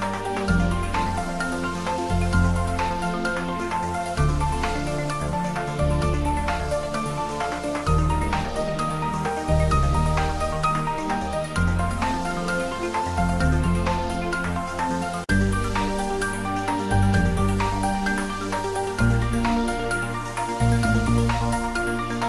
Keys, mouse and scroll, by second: 4.0 click, 6.3 ctrl+z, 8.4 click, 9.0 shift+click, 10.0 shift+right click, 10.4 shift+click, 15.8 x, 16.2 click, 16.9 scroll down 1, 17.2 middle click, 17.5-17.9 scroll up 1, 17.9 x, 18.6 click, 18.9 scroll down 1, 19.0 middle click, 19.9-21.1 typing, 20.1 middle click.